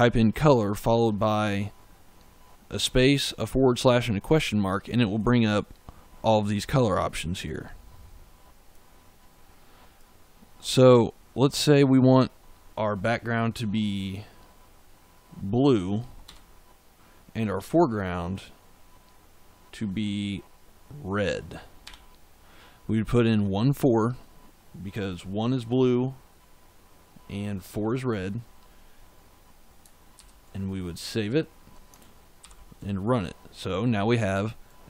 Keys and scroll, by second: 16.1 1, 21.7 4, 30.0 ctrl+s, 32.3 ctrl+shift+z.